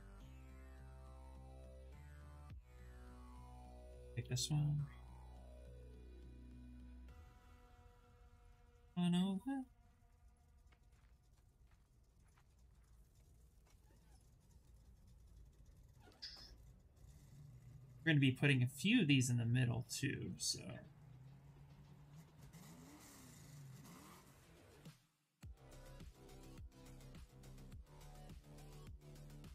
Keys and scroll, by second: 3.9 w, 5.4 f.